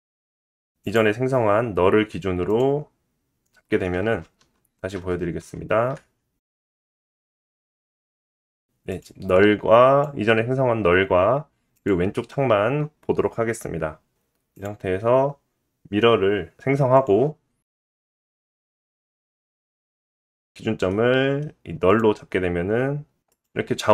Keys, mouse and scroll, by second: 3.8 click, 4.8 ctrl+z, 5.1 ctrl+z, 5.4 ctrl+z, 5.7 ctrl+z, 6.7 /, 7.6 /, 8.4 click, 10.1 click, 10.2-11.3 middle drag, 10.8-11.2 scroll up 2, 11.8-12.3 scroll down 1, 12.3 click, 12.7-13.9 drag, 14.4 middle click, 14.5-19.4 drag, 19.4-21.9 middle drag, 21.9 click, 22.0-23.4 middle drag, 23.4 click, 23.5-23.9 middle drag.